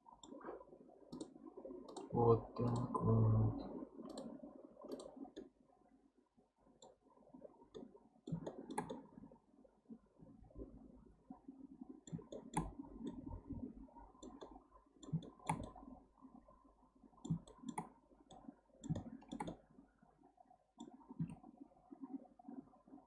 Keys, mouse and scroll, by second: 1.1-4.2 drag, 4.9 click, 5.3-11.9 middle drag, 7.0-7.4 scroll, 7.4-7.7 scroll down 1, 12.3-12.7 shift+middle drag, 12.7-13.0 scroll up 1, 13.0-21.2 middle drag, 21.2 Tab, 22.1-23.0 scroll up 2.